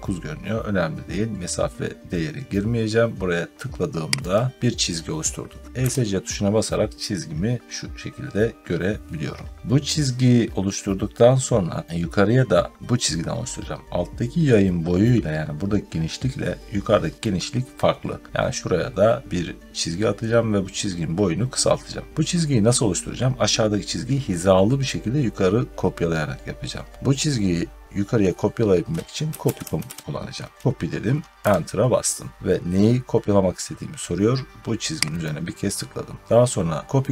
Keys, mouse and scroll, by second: 4.3 click, 5.7 Escape, 6.4 scroll down 1, 6.5 scroll, 8.2 scroll down 3, 11.8 middle click, 13.0-16.1 scroll down 1, 28.9-30.2 typing, 31.3 Return, 35.1 click.